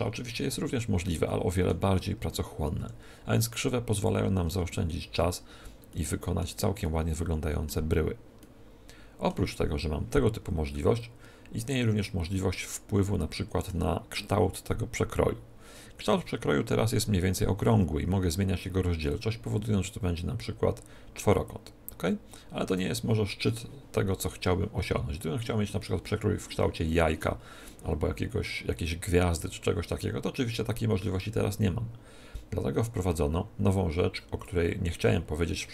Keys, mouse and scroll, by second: 2.7 r, 4.0-5.8 drag, 4.4 Tab, 5.8-10.2 middle drag, 12.4-14.3 middle drag, 18.3 middle click, 19.0-20.8 drag, 28.7-30.5 drag.